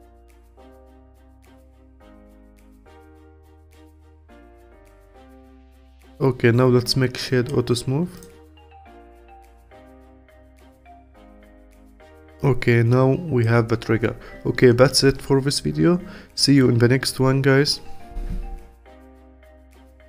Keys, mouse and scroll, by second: 1.1 click, 3.0 Tab, 3.3 click, 3.9-5.3 alt+drag, 5.7-8.1 right drag, 8.1 click, 8.4-9.7 scroll down 11, 9.7-11.7 alt+drag, 11.7 scroll down 2, 12.1-15.3 alt+drag.